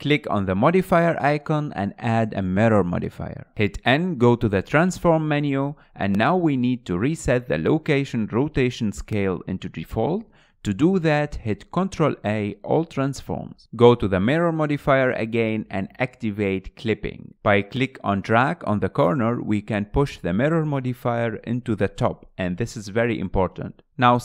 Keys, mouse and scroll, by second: 0.0-2.8 drag, 2.8-3.2 scroll down 2, 3.2-4.6 middle drag, 4.6 n, 9.6-11.7 middle drag, 11.7 ctrl+a, 13.7 scroll up 3, 16.0-19.7 drag, 20.9-22.8 drag, 22.8 scroll up 2, 23.1-24.2 middle drag.